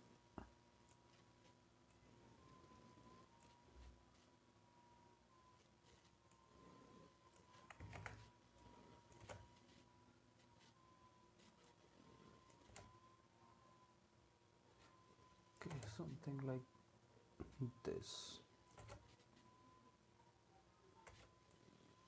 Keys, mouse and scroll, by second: 8.0 ctrl+z, 9.2 space, 12.7 space, 15.7 space, 18.8 space, 21.1 space.